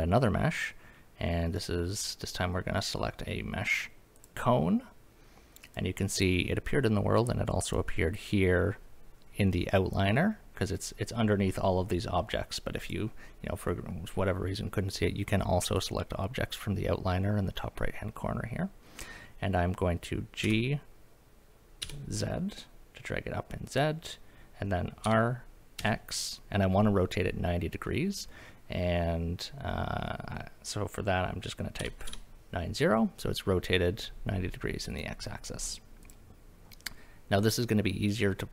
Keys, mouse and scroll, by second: 5.6 click, 7.6 click, 12.8 click, 15.8 click, 20.4 g, 21.8 z, 23.7 click, 25.0 r, 25.8 x, 31.8 KP_9, 32.1 KP_0, 35.0 click, 36.0 click.